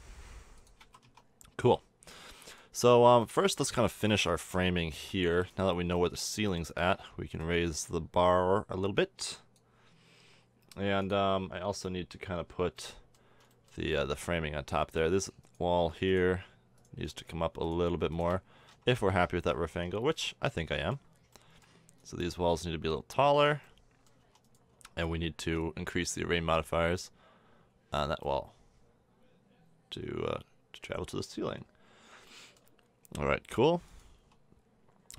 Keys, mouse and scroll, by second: 0.7 shift+a, 1.0 Tab, 1.6 a, 5.1 Tab, 5.4-6.0 middle drag, 6.9 Tab, 7.8-9.0 right drag, 13.0 middle click, 13.8-14.8 middle drag, 18.4-20.4 drag, 18.9 KP_1, 24.2 Tab, 24.7 Tab, 25.4 Tab, 26.4-28.7 middle drag, 29.7 middle drag, 31.0 middle click, 31.8-32.2 middle drag, 32.8-34.1 middle drag, 34.1 Tab.